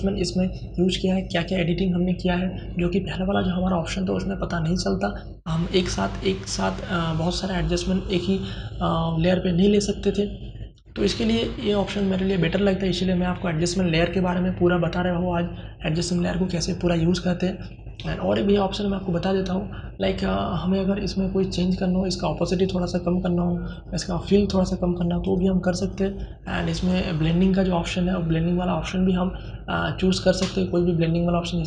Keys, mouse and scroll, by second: 2.6 click, 11.1 click, 13.4 click, 17.2 click, 23.0 click, 31.2 click.